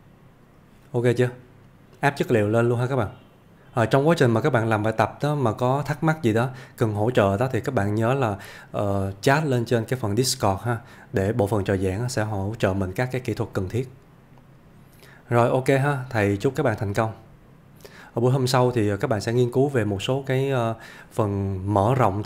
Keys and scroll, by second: 10.7 scroll down 1.